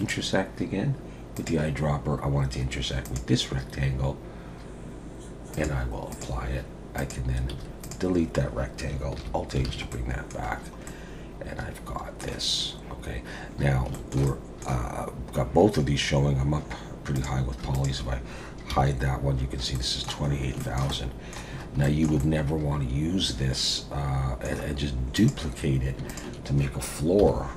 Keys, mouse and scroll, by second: 0.0 click, 1.3 click, 5.5 click, 7.0 click, 7.5 x, 9.2 alt+h, 9.7 alt+a, 9.9 middle click, 10.5-10.9 scroll down 2, 10.9 middle click, 13.6-13.9 scroll down 3, 13.9 shift+middle click, 14.3 middle click, 17.2 click, 17.7 shift+click, 18.7 h, 19.7 middle click, 20.3-20.6 scroll up 2, 20.6 shift+middle click, 20.9 middle click, 21.5 scroll up 2, 21.8 shift+middle click, 22.2 middle click, 24.6-25.2 scroll down 4, 25.2 click, 26.1 shift+click, 27.2 KP_7.